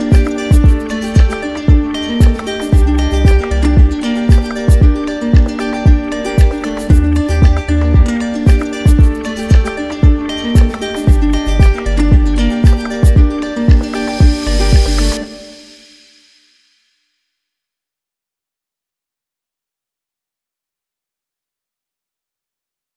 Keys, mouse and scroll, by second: 1.0-2.1 drag, 2.3-3.3 drag, 4.9 click, 12.8 alt+click, 14.0 right click, 16.3 right click, 16.5 ctrl+z.